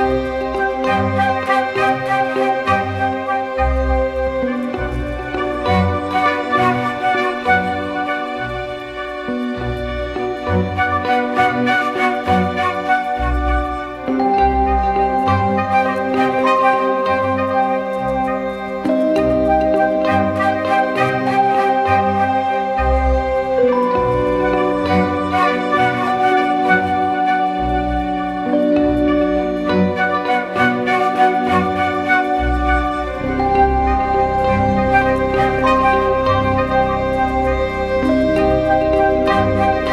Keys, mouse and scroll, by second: 18.4 double click, 27.0-27.7 typing.